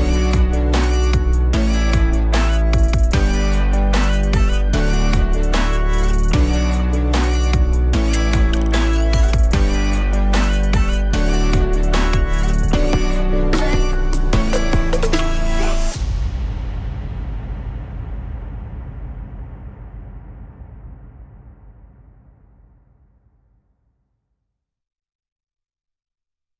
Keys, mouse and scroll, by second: 2.0 click, 2.9 click, 3.1-5.7 drag, 7.0 alt+click, 7.6 right click, 8.2 click, 8.5 alt+click, 8.9 scroll down 1, 9.2 alt+click, 9.7-10.9 scroll up 1, 10.9 click, 12.2 click, 12.4 click, 12.7 click, 14.4 click, 14.7 click, 16.3 scroll down 1, 17.0-17.5 alt+middle drag, 17.5 alt+click, 18.0 KP_0, 19.9-21.7 drag, 21.7-23.4 scroll up 1, 23.4-24.9 scroll up 1, 24.9-26.5 drag.